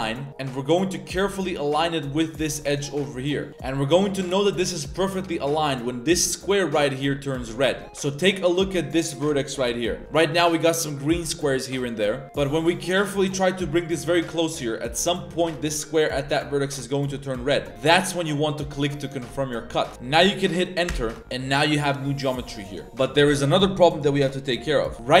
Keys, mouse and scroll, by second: 24.6-25.2 middle drag.